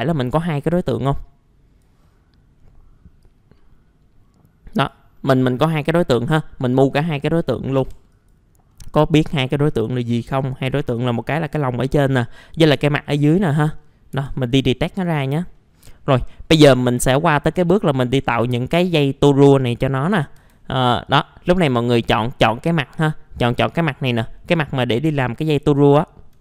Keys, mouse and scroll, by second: 0.6 click, 2.0 middle click, 2.5 scroll up 1, 3.2-5.1 drag, 5.1 middle click, 5.7 scroll up 1, 6.0 middle click, 6.2-6.5 scroll down 1, 7.1-7.8 scroll up 1, 7.8 F3, 8.1 click, 8.7 middle click, 9.4 scroll down 1, 10.4 click, 13.3 ctrl+z, 13.8 middle click, 14.1 F3, 14.5 middle click, 14.7-15.5 scroll down 1, 15.5 middle click, 15.7 scroll down 1, 15.9 scroll up 1, 17.1 alt+middle click, 17.8 scroll down 1, 19.4 scroll up 1, 20.4 F4, 21.0-22.1 drag, 22.4-22.8 scroll down 1, 23.9 middle click, 24.1-25.1 scroll down 1, 25.2 alt+middle click, 26.0 alt+middle click.